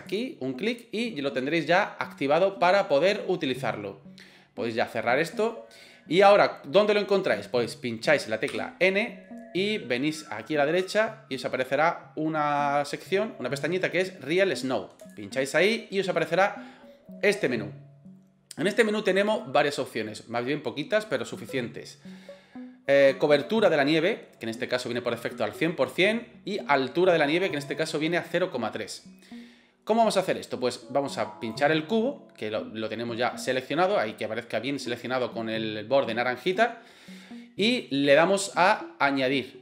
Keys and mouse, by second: 8.5 n, 15.0 click, 31.4 right click.